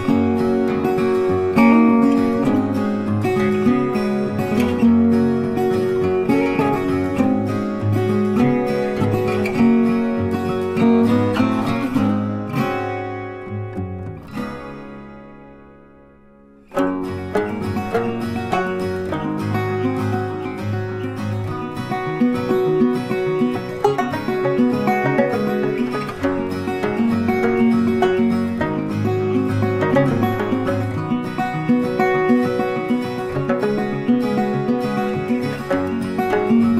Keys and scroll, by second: 9.2 ctrl+g, 12.6 ctrl+z, 17.1 ctrl+c, 17.2 ctrl+f, 36.2 ctrl+z.